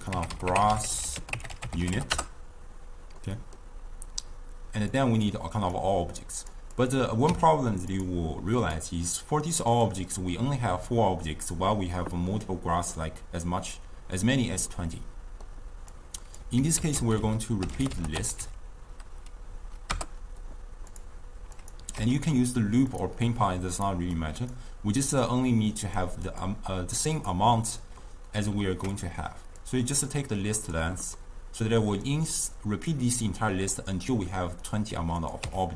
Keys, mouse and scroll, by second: 0.0-1.0 drag, 1.0 s, 3.2-5.0 middle drag, 5.0-6.9 drag, 7.3 w, 12.3-16.0 middle drag, 16.0 click, 16.8 ctrl+a, 21.6 click, 22.5 x, 23.0-23.9 drag, 24.2 click, 25.2-28.0 drag, 28.0-29.7 middle drag, 29.7 click, 31.2-32.1 middle drag, 32.1 click, 35.2 click, 35.5 w.